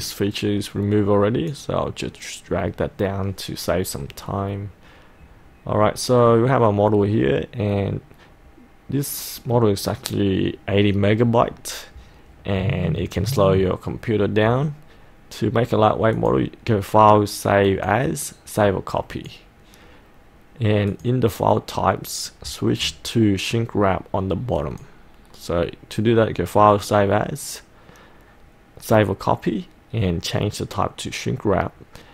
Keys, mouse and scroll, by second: 0.1 click, 1.6 click, 4.7-5.8 scroll up 1, 5.8-6.3 scroll down 1, 6.3-9.8 middle drag, 9.9 scroll down 1, 12.9-14.9 middle drag, 16.2-18.9 drag, 22.9-24.3 scroll down 1, 24.7 click, 29.7-32.1 drag.